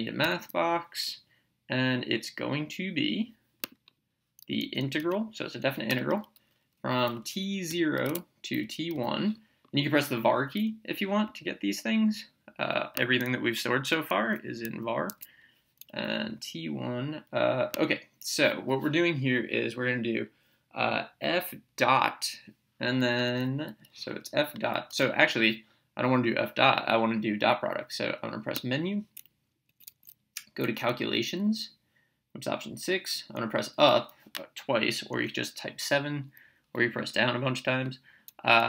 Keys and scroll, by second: 0.6 m, 4.6 Right, 5.9 Return, 7.0 t, 7.7 0, 8.0 Tab, 8.5 t, 8.9 1, 10.3 Down, 15.1 Escape, 23.3 f, 24.9 BackSpace, 28.6 Menu, 29.7 Down, 31.0 Right, 32.9 Up, 35.2 Right.